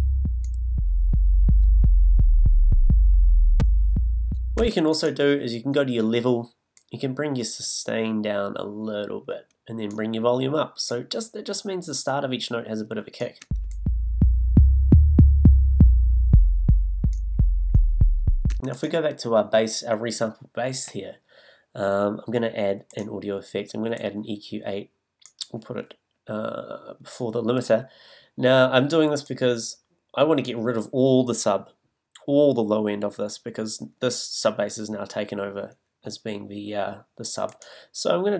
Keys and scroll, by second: 4.6 space, 13.4 space, 18.5 space.